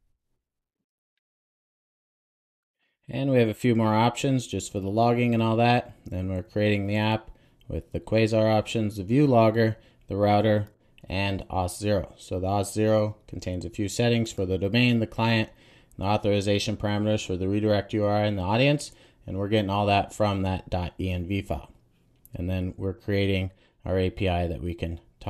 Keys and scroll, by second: 1.1 super+j, 1.5 Return, 2.3 super+s.